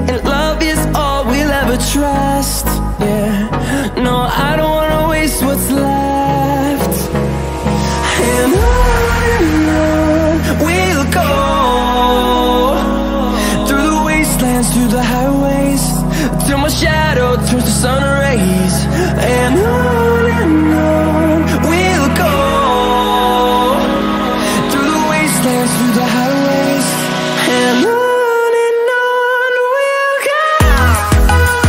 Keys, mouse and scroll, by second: 0.4-2.7 alt+drag, 4.4 scroll down 1, 5.3-5.7 alt+scroll down 1, 7.9 click, 10.0 click, 11.0 alt+scroll up 1, 12.9 click, 14.0 alt+scroll up 1, 14.9 scroll down 1, 17.1 click, 19.8 click, 22.0-22.5 typing, 23.4-31.1 drag.